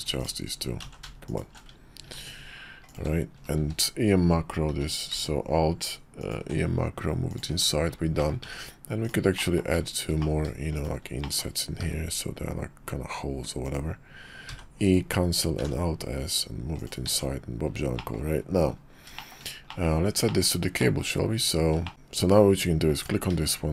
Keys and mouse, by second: 0.9 ctrl+z, 1.2 alt+shift+click, 2.0 ctrl+b, 3.4 q, 3.6 q, 4.7 q, 7.5 Tab, 8.2 click, 8.4 Tab, 9.0 click, 9.4 middle click, 10.2 middle click, 10.8 shift+middle click, 11.2 click, 11.8 i, 14.5 e, 15.6 alt+s, 17.0 Tab, 18.0 drag, 19.1 shift+drag, 19.6 drag, 20.2 shift+click, 20.7 middle drag, 21.8 shift+click, 22.9 click.